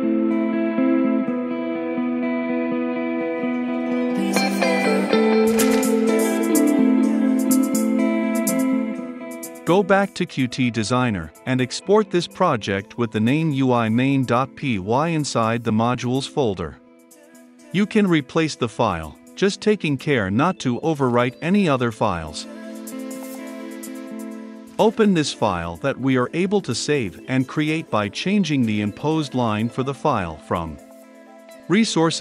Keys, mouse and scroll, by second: 0.5-1.7 typing, 2.8 click, 3.6 ctrl+v, 4.3-30.8 drag, 30.5-32.2 typing, 32.0 click.